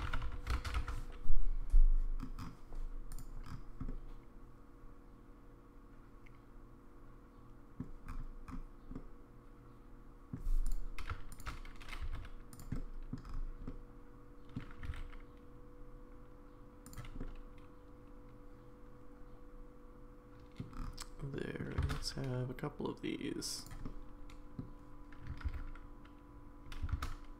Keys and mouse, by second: 3.9-7.8 middle drag, 8.9-10.3 middle drag, 11.3 shift+click, 12.0 s, 12.7-13.1 middle drag, 13.7-14.6 middle drag, 14.8 g, 17.2-20.6 middle drag, 21.3 middle drag, 21.8 shift+d, 23.8-24.6 middle drag, 25.5 ctrl+z, 26.7 g.